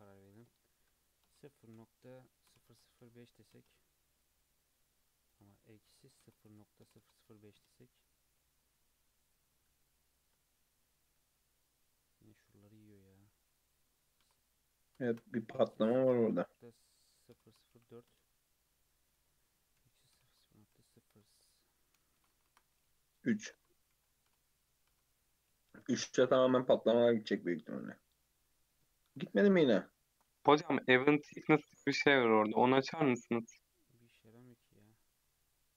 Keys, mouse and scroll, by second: 0.3-2.7 drag, 2.7 KP_0, 5.3-7.0 drag, 7.0 KP_0, 8.6-9.9 scroll up 2, 9.9-11.2 shift+middle drag, 11.2 Tab, 12.0 Tab, 13.5-15.1 drag, 15.1 BackSpace, 17.5 KP_0, 19.1-20.3 drag, 20.3 KP_0, 22.3 BackSpace, 22.5 BackSpace, 27.3-30.5 drag, 31.9 BackSpace, 35.1 click.